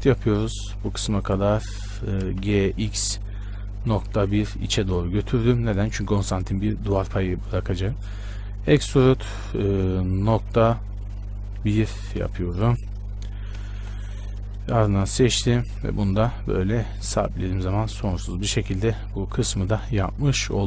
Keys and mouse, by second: 0.0 e, 2.6 g, 8.8 e, 14.0 KP_Decimal, 16.6 e, 17.8 Tab.